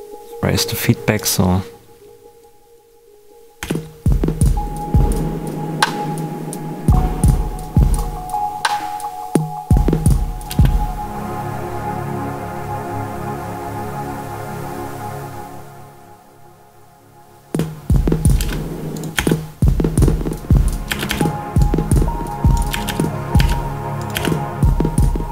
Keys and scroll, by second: 3.5 space, 10.4 space, 17.4 space, 20.8 space, 22.6 space.